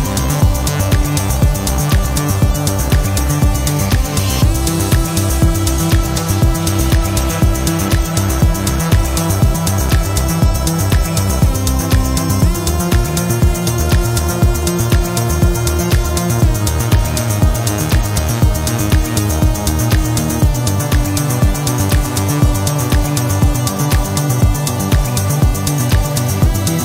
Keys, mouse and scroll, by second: 0.7 click, 2.5 click, 3.8 click, 5.1 click, 7.4-8.8 drag, 9.9 click, 14.7 click, 15.4 click, 18.5 click, 19.4 click, 20.8 click, 21.8 click.